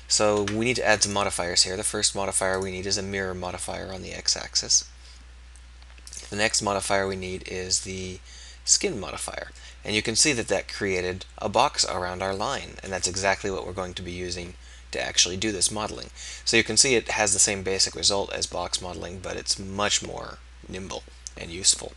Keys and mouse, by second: 1.0-9.7 drag, 9.7-11.3 middle drag.